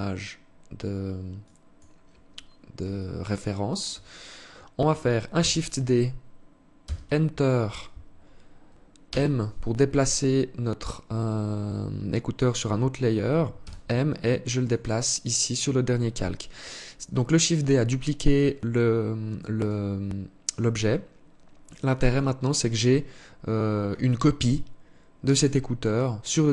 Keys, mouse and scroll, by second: 0.8 click, 2.4 alt+click, 4.8 shift+d, 8.4 m, 13.0 m, 19.0 right click, 21.5 click, 23.8 right click.